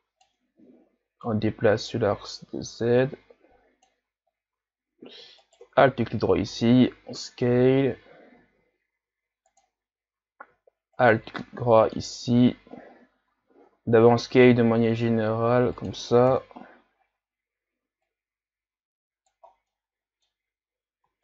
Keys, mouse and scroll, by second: 0.5 ctrl+z, 1.2-4.3 drag, 4.3-5.5 scroll down 2, 5.5 alt+right click, 6.5 s, 11.0 alt+right click, 11.4-12.9 middle drag, 12.9 a, 13.3 a, 13.8 s, 16.3 KP_1, 16.9-18.0 scroll up 1, 18.0-19.5 drag, 19.5 scroll down 3, 19.7 middle click, 20.4-21.2 scroll up 4.